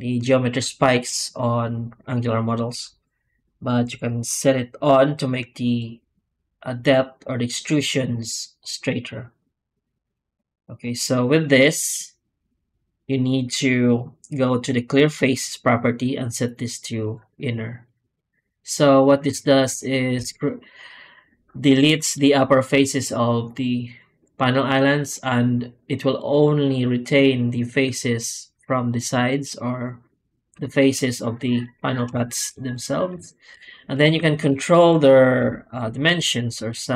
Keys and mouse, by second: 25.1 drag, 32.1 shift+middle drag, 33.1 shift+middle drag, 35.3 F9.